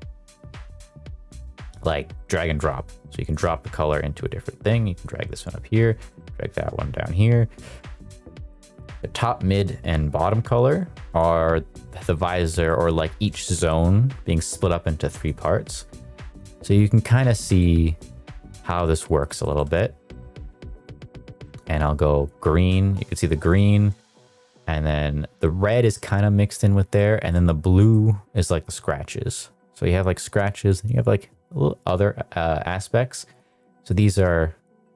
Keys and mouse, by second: 6.5 click, 8.0 middle click, 8.5 middle click, 10.2 click, 12.6 middle click, 13.3 shift+middle drag, 17.5-18.5 shift+middle drag, 18.8 middle click, 19.3 shift+middle click, 20.7 click, 23.0 middle drag, 23.3 shift+middle drag, 23.9 shift+middle click, 27.0 shift+middle click, 27.9-28.3 shift+middle drag.